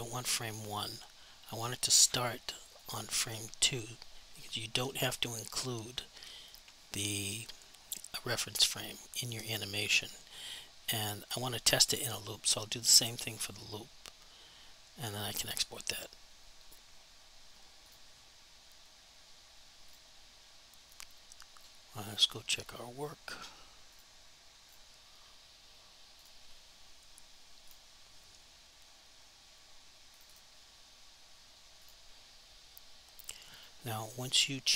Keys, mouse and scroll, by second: 2.8 click, 12.3 click, 24.0 click.